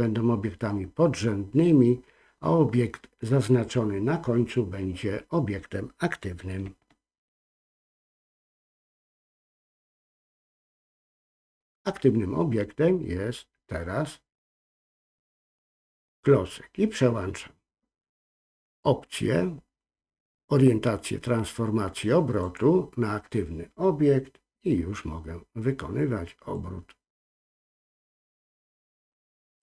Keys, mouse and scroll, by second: 7.4 shift+click, 8.2 shift+click, 9.1 shift+click, 15.6-22.5 drag, 26.5-29.6 drag.